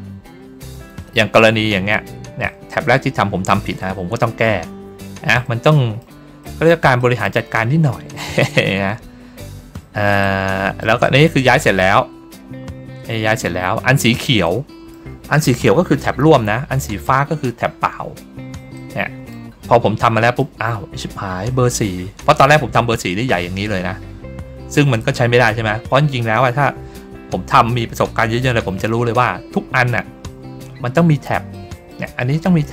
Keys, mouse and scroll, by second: 4.6-5.2 ctrl+scroll down 2, 5.6 middle click, 6.3 middle click, 6.9 middle click, 8.0 middle click, 9.1-9.5 ctrl+scroll up 1, 9.5 ctrl+scroll down 1, 10.1 middle click, 10.9 middle click, 11.4 middle click, 12.1-12.7 ctrl+scroll down 2, 13.5-14.0 ctrl+scroll down 2, 14.3 middle click, 18.6 middle click, 19.5 ctrl+scroll down 1, 19.9 middle click, 20.6 ctrl+scroll down 1, 31.4 middle click, 32.5 middle click.